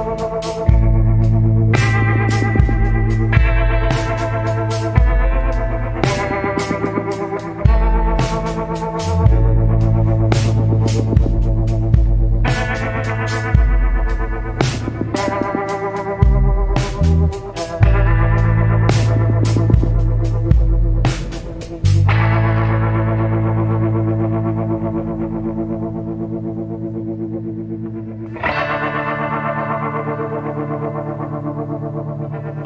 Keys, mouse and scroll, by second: 0.0 scroll up 1, 0.1 scroll down 1, 1.7 scroll up 1, 9.5 scroll down 1, 10.0 scroll up 1, 11.7 scroll up 1, 14.0 scroll up 1, 16.7 scroll down 1, 18.1 scroll up 1, 24.8 scroll down 1.